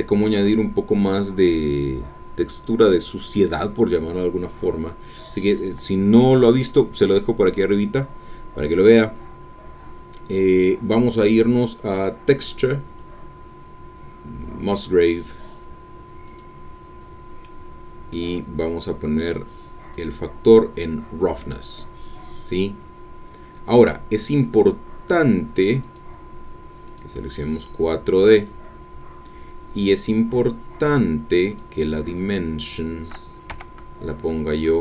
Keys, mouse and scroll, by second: 14.6 click, 16.2 click, 16.8-17.4 scroll up 1, 17.4-19.5 scroll up 1, 19.5 middle click, 19.9-22.0 drag, 25.8 click, 26.8 click, 31.5 click, 33.5 KP_0.